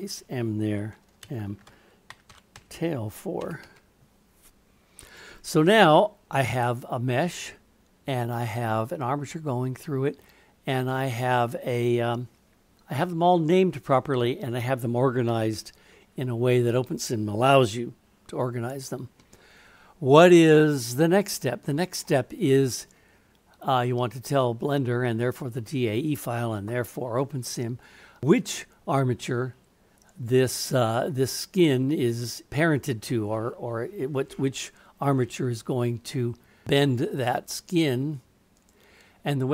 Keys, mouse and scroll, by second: 20.4-22.0 middle drag, 38.6-39.5 drag.